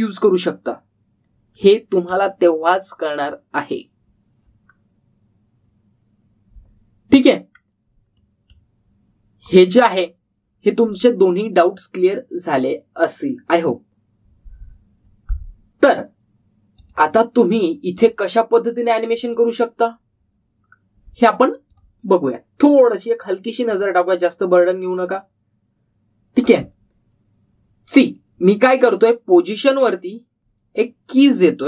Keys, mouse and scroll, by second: 0.1 click, 2.5-3.2 middle click, 8.5 scroll down 1, 9.1-9.8 middle click, 10.4 click, 16.3-17.1 scroll up 1, 17.8 click, 22.0-23.2 typing, 22.7 click, 27.2-27.9 typing, 27.4 click, 29.6-30.8 typing.